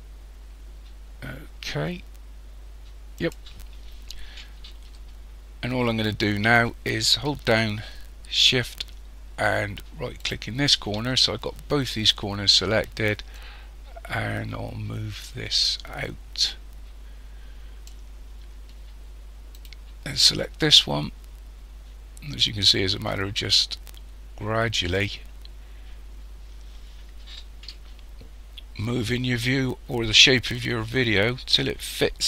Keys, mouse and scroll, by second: 10.2 shift+right click, 13.4 click, 19.6 right click, 20.6 click.